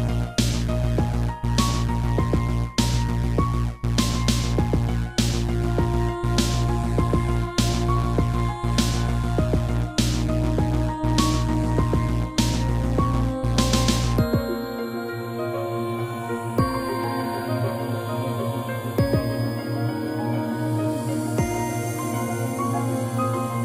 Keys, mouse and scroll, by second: 0.1 click, 0.2 click, 0.9 click, 1.0 1, 2.1 scroll, 2.2 middle click, 2.7 scroll up 2, 3.0 shift+middle click, 3.2 middle click, 3.5 g, 4.8 g, 5.9 click, 6.0 click, 6.2 scroll down 3, 6.5 middle click, 6.9 scroll up 2, 7.3 shift+middle click, 7.8 r, 8.3 r, 10.2 click, 10.8 7, 11.6 r, 12.4 click, 12.5 click, 12.8 click, 13.4 r, 14.6 click, 14.8 click, 16.2 7, 16.8 g, 17.8 click, 17.9 click, 18.3 r, 19.1 click, 19.4 middle click, 20.4 middle click, 22.1 scroll down 1, 22.4 shift+middle click, 23.4 click.